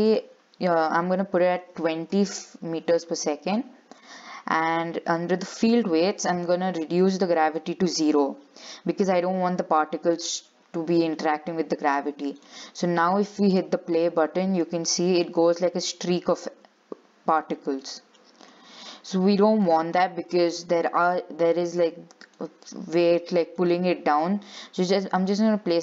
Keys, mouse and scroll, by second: 3.7-5.8 scroll down 8, 5.8 click, 6.1-7.0 scroll down 3, 7.0-9.5 drag, 9.5-10.0 scroll down 4, 10.0-12.5 shift+middle drag, 12.5 click, 13.7 click, 14.4 middle click, 15.2 scroll down 5, 15.4 shift+middle click, 15.8-16.1 scroll up 4, 17.5 click, 18.0 shift+middle click, 18.6-19.4 scroll up 7, 19.8 click, 22.4-25.8 drag.